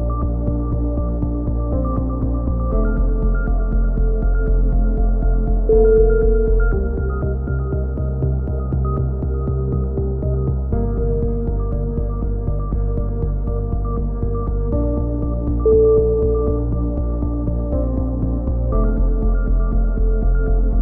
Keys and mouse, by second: 0.4 a, 1.5-2.8 drag, 1.5 right click, 1.8 right click, 2.9 ctrl+z, 3.1 a, 5.6 right click, 5.7 click, 6.6 click, 7.2 click, 8.3-9.8 drag, 10.1 a, 11.2 click, 11.5-12.5 right drag, 11.9 x, 12.9 click, 12.9 right click, 13.9 e, 15.5 e, 16.6 click, 16.6 right click, 17.2 alt+m, 17.2 a, 18.7 click, 18.7 right click, 19.7 right click, 19.9-20.8 drag.